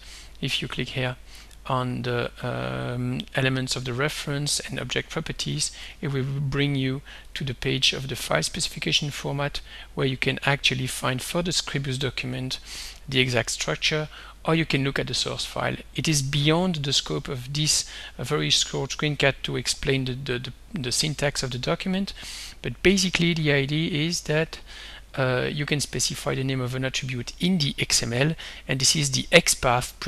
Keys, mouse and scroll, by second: 0.9-1.4 scroll down 2, 1.4-1.7 scroll down 1, 1.7-2.4 scroll up 1, 2.8-5.8 scroll up 1, 5.8 middle click, 7.3 click, 9.5 click, 10.1-10.6 scroll up 1, 12.2 scroll down 2, 12.8-13.3 scroll down 2, 15.0 click, 19.0 scroll down 2, 20.9 scroll up 2, 23.4 click, 23.7-24.4 scroll down 2.